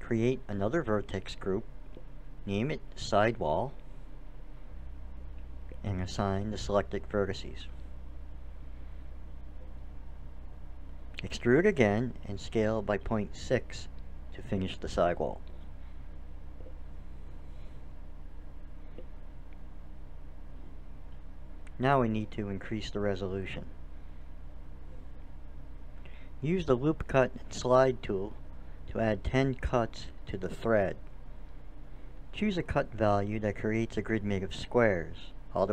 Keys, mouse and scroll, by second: 0.2-4.7 drag, 4.8 l, 8.7-10.2 drag, 10.7 e, 11.8 s, 18.5-23.9 middle drag, 26.7-29.9 drag, 31.6-32.9 middle drag, 32.9-34.5 drag.